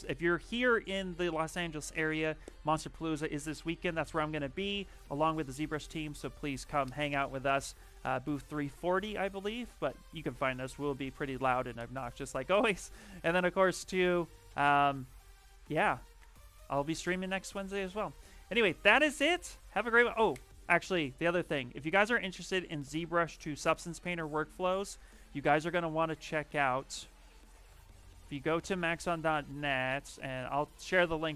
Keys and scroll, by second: 27.9 x.